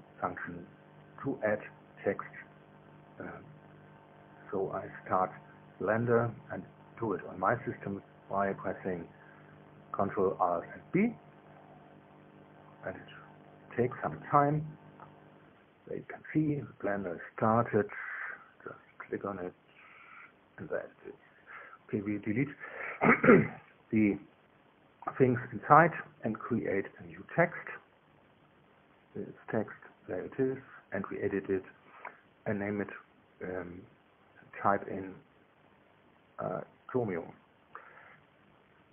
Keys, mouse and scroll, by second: 9.3 ctrl+alt+b, 15.7 click, 16.9 click, 17.6 click, 21.5 click, 23.9 Delete, 24.5 Return, 27.6 shift+a, 29.2 click, 32.4 Tab, 33.9-37.6 typing.